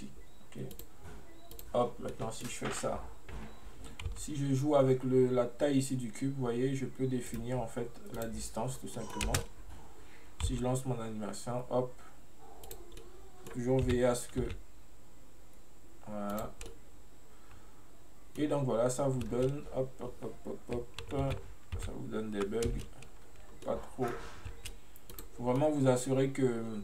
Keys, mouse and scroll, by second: 0.8 click, 2.2-4.2 middle drag, 4.2 s, 8.2 drag, 8.8 scroll down 1, 9.0-9.3 middle drag, 9.3 space, 13.1 middle click, 13.9 g, 16.8-19.3 middle drag, 19.3 space, 21.4 ctrl+z, 21.9 ctrl+z, 22.7 space, 23.1 scroll up 2, 23.6 scroll down 1, 23.7-24.6 middle drag, 24.6 space, 25.1 click, 25.6 scroll down 1, 25.6-26.8 middle drag.